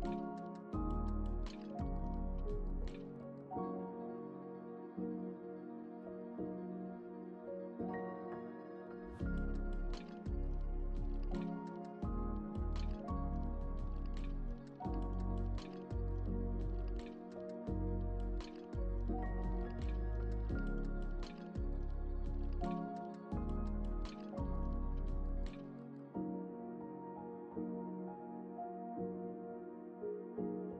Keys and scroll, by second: 13.3 space.